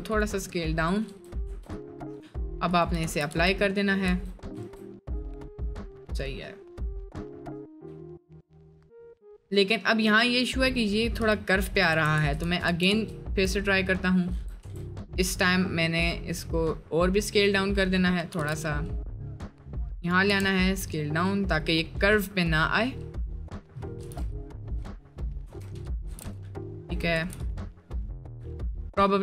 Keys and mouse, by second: 1.1 Tab, 1.5 Tab, 3.0 ctrl+a, 3.3 Tab, 3.5 middle click, 4.1 Tab, 4.5 Tab, 5.6-7.3 drag, 7.5-10.1 middle drag, 10.1 middle click, 11.2 ctrl+middle click, 11.6 middle click, 11.9-13.4 ctrl+z, 14.3 Tab, 14.7 Tab, 18.3 g, 20.3 s, 24.0 g, 25.5 s, 26.1 g, 27.0 g.